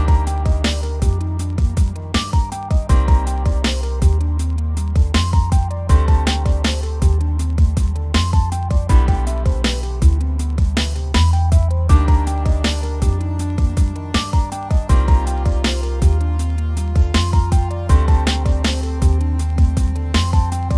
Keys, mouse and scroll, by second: 0.1 scroll down 2, 0.3 click, 0.5-1.2 middle drag, 1.2-1.6 scroll up 1, 1.6-4.4 scroll down 1, 5.5 middle drag, 5.7 scroll up 2, 5.8-6.4 middle drag, 6.4 click, 6.5 middle click, 7.0 Tab, 7.5 alt+click, 7.9 click, 8.6 alt+Left, 8.9 alt+Left, 9.5 ctrl+z, 9.6 ctrl+z, 10.1 Left, 10.4 scroll down 1, 10.6 Left, 10.6 middle click, 10.8 scroll up 2, 10.9-12.9 shift+middle drag, 12.9 scroll up 2, 13.0-14.5 middle drag, 14.5 click, 14.9 alt+click, 15.2 click, 16.5 click, 17.3 Left, 18.1 Left, 18.4 scroll down 5, 18.8 scroll up 2, 19.0-20.7 middle drag.